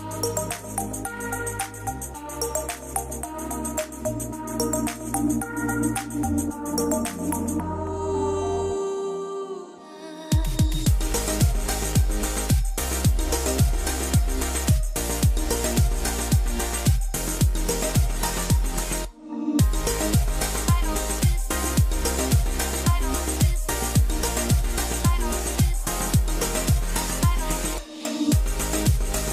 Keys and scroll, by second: 1.2-2.0 typing, 22.7 KP_0, 22.9 Return, 26.8 KP_6, 27.1 Return, 27.3 Return, 27.6 Return.